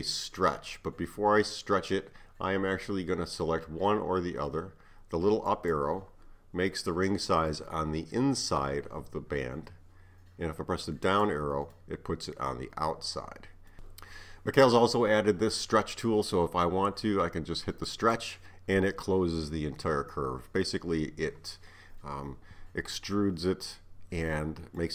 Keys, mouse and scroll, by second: 5.5 click, 6.7-9.7 middle drag, 11.1 click, 11.8-13.8 middle drag, 17.9 click, 24.8-24.9 middle drag.